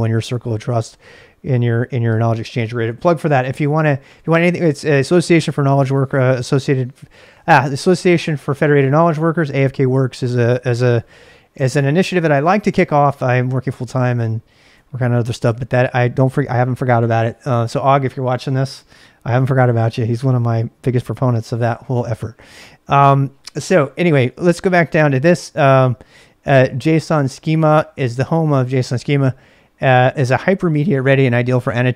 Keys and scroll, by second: 24.7 j.